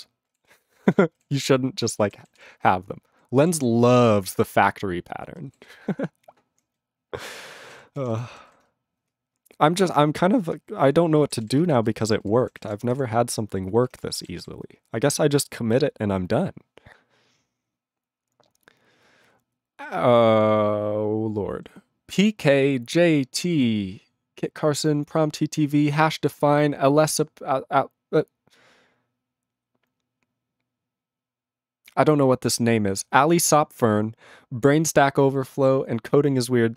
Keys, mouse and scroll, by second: 0.4 ctrl+s, 0.8 ctrl+g, 1.3 ctrl+s, 1.8 ctrl+space, 1.9 ctrl+n, 2.0 ctrl+g, 2.3 ctrl+s, 2.6 ctrl+n, 3.0 ctrl+n, 3.5 ctrl+s, 4.4-5.2 ctrl+n, 5.6 ctrl+n, 5.6 ctrl+s, 5.8-6.6 ctrl+p, 6.7-7.6 ctrl+n, 7.7 ctrl+e, 7.9 ctrl+p, 8.1 ctrl+p, 8.4 ctrl+s, 10.9 ctrl+s, 11.4 ctrl+s, 11.6 ctrl+space, 12.1 ctrl+alt+b, 12.2 ctrl+g, 12.6 ctrl+s, 14.1 ctrl+s.